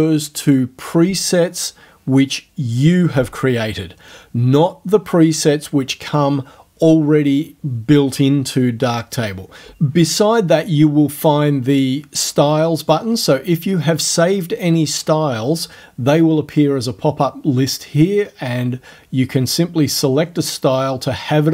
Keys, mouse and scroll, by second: 12.9 click.